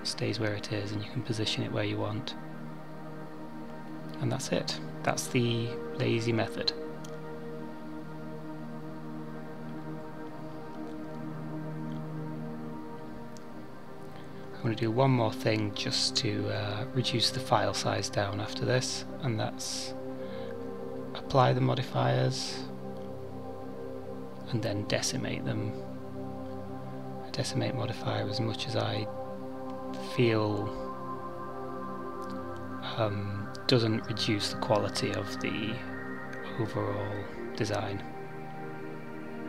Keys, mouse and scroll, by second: 3.5 middle click, 25.8 click, 26.1 click, 27.0 click, 31.3 scroll up 3, 34.1 click.